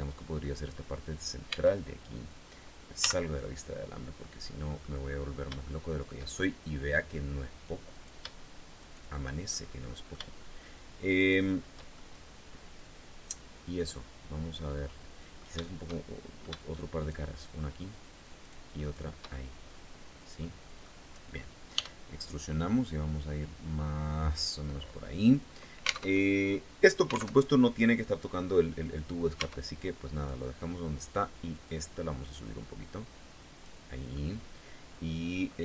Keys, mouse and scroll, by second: 1.1 Tab, 2.6 z, 3.0-4.6 drag, 5.2 shift+middle click, 7.5 shift+right click, 8.4 shift+right click, 9.1 shift+middle click, 10.7 shift+right click, 11.5-15.2 shift+middle drag, 15.4 shift+middle click, 16.6 shift+right click, 18.0 shift+right click, 18.4 shift+right click, 18.8-20.6 shift+middle drag, 21.3 e, 23.9 click, 25.6 alt+Tab, 27.0 alt+Tab, 29.0 Tab, 29.7 right click, 31.2-33.4 drag, 33.8-35.5 middle drag, 35.5 alt+Tab.